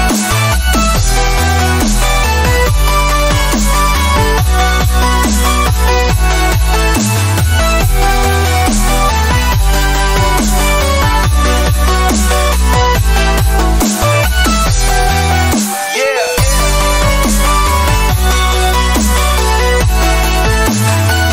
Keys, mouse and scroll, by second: 2.2 ctrl+alt+Num_Lock, 2.8 ctrl+alt+g, 11.0 click, 13.8 b, 15.9 typing, 18.1 F5.